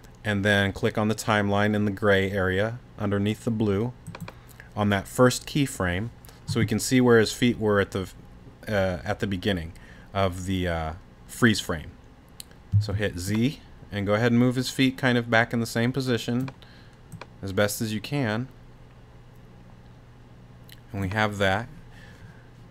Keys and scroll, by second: 12.7 z.